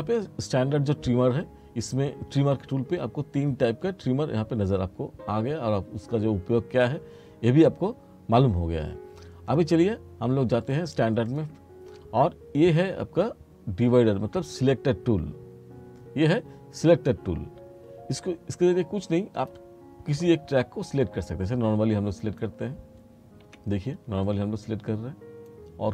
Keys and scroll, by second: 23.6 F2.